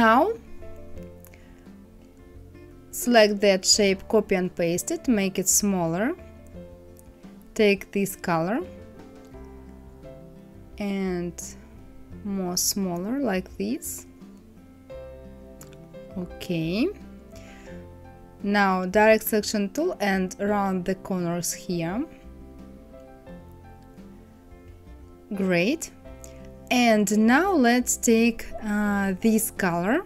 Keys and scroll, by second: 2.3 ctrl+c, 2.8 ctrl+f.